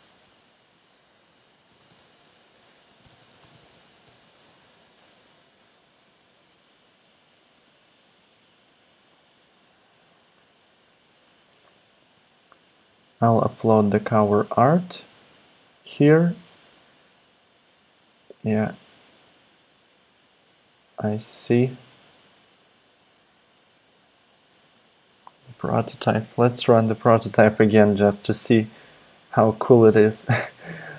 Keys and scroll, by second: 1.4-4.5 typing, 4.6 super+Left, 5.2 shift+Return, 13.2 Return.